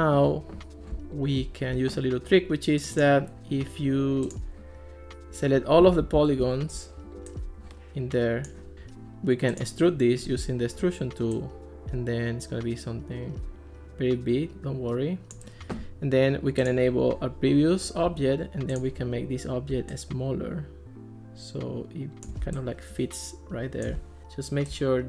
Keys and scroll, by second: 6.1 super+a, 18.1 Escape.